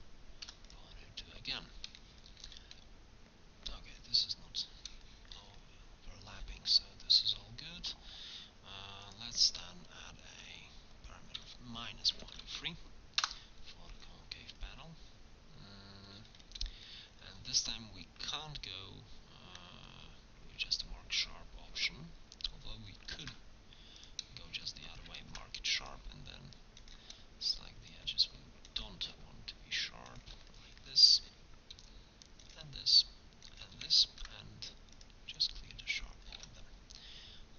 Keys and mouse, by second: 0.5 i, 1.6 middle click, 4.7 middle click, 11.0-12.7 middle drag, 14.5 middle click, 21.8 middle click, 23.1 ctrl+e, 25.2 ctrl+Tab, 30.5 click, 33.5 click, 34.1 ctrl+e, 36.4 Tab.